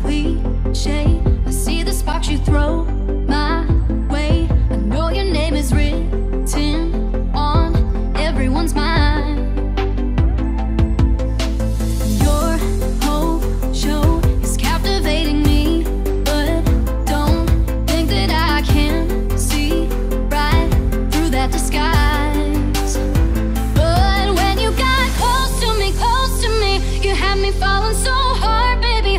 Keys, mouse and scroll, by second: 3.8 shift+3, 5.0-6.9 typing, 8.3-9.4 typing, 9.5 ctrl+a, 10.9 click, 14.2 Right, 18.1 Up, 19.9-22.3 alt+drag, 22.3 Down, 23.3 Right, 25.2 v, 25.5 click.